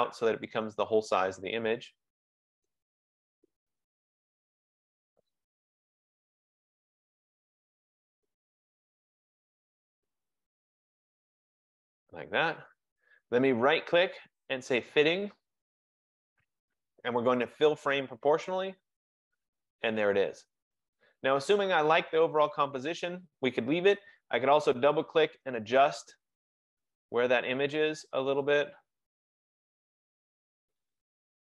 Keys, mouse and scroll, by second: 0.5 click, 5.2 click, 8.1 click, 12.2 click, 13.8 right click, 17.5 F15, 18.6 click, 24.4 click, 24.6 click, 27.3 click.